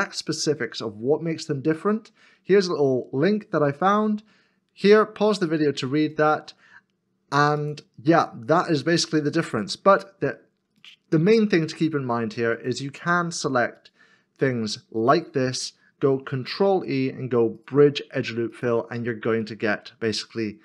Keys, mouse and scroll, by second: 10.8 alt+click, 12.5 alt+shift+click, 13.8 alt+shift+click, 15.0 alt+shift+click, 16.5 ctrl+e, 19.5 middle click.